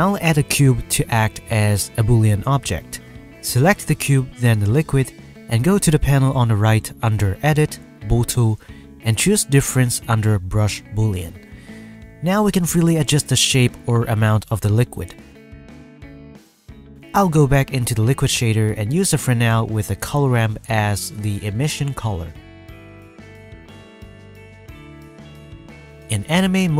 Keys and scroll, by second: 1.7 o, 1.9 g, 2.8 g, 11.9-13.9 typing.